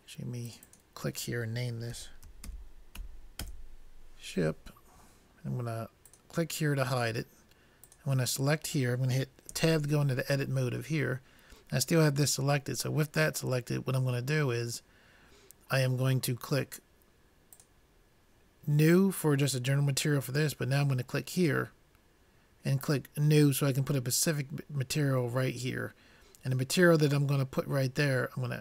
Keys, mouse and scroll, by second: 6.1-9.7 drag, 9.7 Tab, 17.7-19.5 drag, 21.5-24.7 drag.